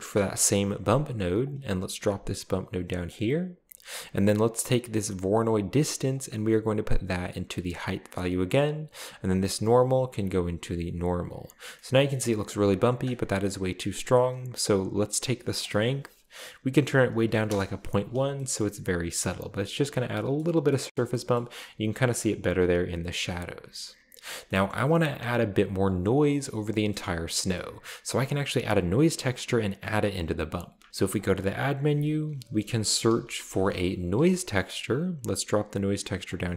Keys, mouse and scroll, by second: 1.4 click, 3.1 click, 4.0 scroll up 1, 4.7 click, 6.1-8.0 drag, 9.7-11.0 drag, 12.0-12.5 scroll up 2, 15.6 click, 17.3 typing, 17.5 Return, 18.6-19.1 shift+middle drag, 18.8-19.3 shift+scroll up 2, 19.8-20.1 scroll down 2, 20.4 middle click, 20.9 shift+middle click, 21.0 shift+scroll up 1, 21.3-22.0 shift+middle drag, 21.7-22.2 scroll up 1, 23.3-24.5 scroll down 1, 24.7-25.5 middle drag, 27.0-27.9 middle drag, 27.7-28.1 scroll up 2, 30.8-34.3 typing, 31.2 click, 31.7 click, 31.9 click, 34.1 Return, 36.2 click.